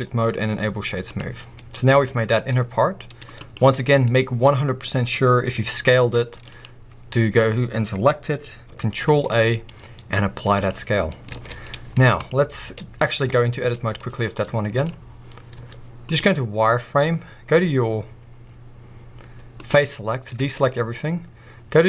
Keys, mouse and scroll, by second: 1.3 scroll down 1, 1.5 middle click, 1.9 alt+a, 2.5-3.4 middle drag, 3.4-3.8 drag, 3.8 middle click, 4.1-5.9 scroll up 2, 5.9 scroll up 1, 5.9 s, 6.6-9.0 right drag, 9.0 ctrl+a, 10.9 scroll down 2, 11.1 middle click, 11.3 alt+a, 12.2-13.2 drag, 13.2 b, 13.5 middle click, 14.0-14.4 scroll up 2.